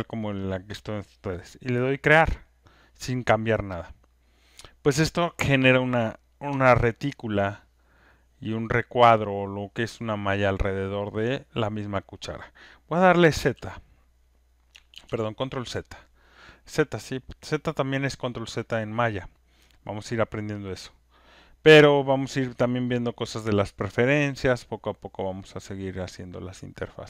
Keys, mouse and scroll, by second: 2.0 click, 6.5 click, 11.0 alt+click, 14.9 ctrl+z, 19.0-24.2 drag, 26.0-27.0 drag.